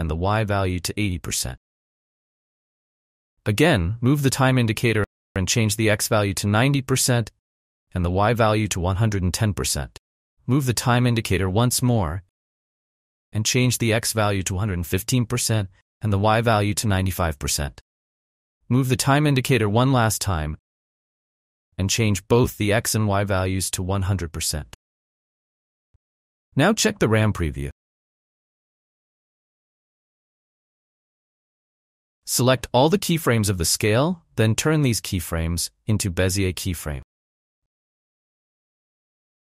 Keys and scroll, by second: 0.8-1.6 typing, 5.9-6.8 typing, 8.2 typing, 9.1 Return, 14.3 1, 15.7 9, 17.0 Return, 23.4 1, 23.9 0, 24.1 0, 24.3 Return, 25.6 1, 26.3 0, 26.5 Return, 27.4 space, 32.5 space, 38.1 space.